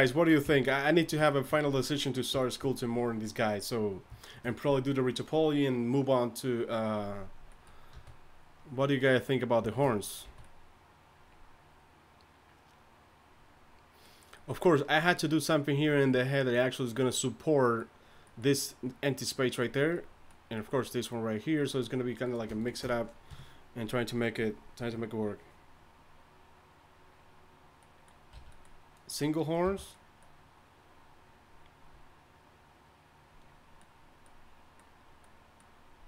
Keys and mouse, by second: 0.4 KP_1, 7.9 a, 10.3 a, 22.4 click, 23.3 KP_3, 28.3 a, 29.7 h.